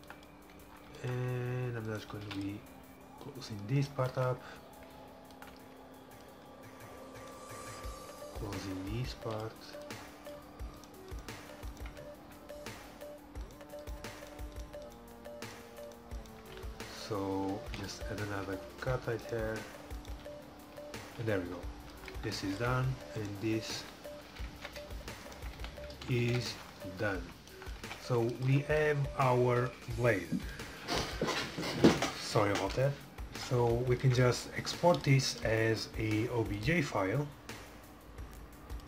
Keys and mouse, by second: 2.0-3.8 right drag, 2.3 e, 3.3-5.7 drag, 4.2-5.2 middle drag, 7.3-9.2 right drag, 9.3 e, 9.9-11.8 drag, 10.9-13.9 right drag, 12.1 f, 12.4 a, 16.6 f, 17.8 ctrl+r, 17.9 middle click, 19.3 middle click, 20.4 f, 20.8 f, 21.1 a, 21.4 middle click, 23.2 right click, 23.9 f, 24.6 ctrl+z, 25.6 f, 25.8 a, 26.3 ctrl+s, 27.4 middle click, 27.6 click, 27.9 Tab, 35.0 click, 35.3 middle click, 36.1-38.4 drag.